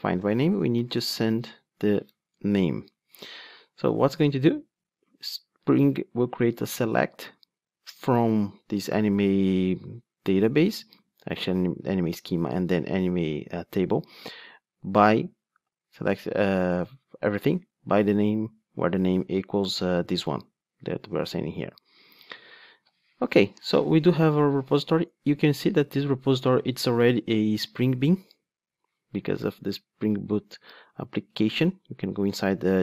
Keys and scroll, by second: 31.3 ctrl+Tab.